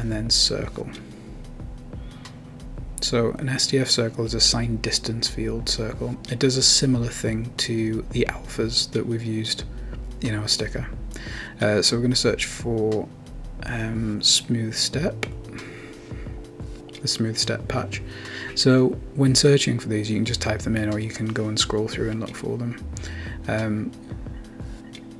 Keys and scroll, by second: 8.6-10.7 typing.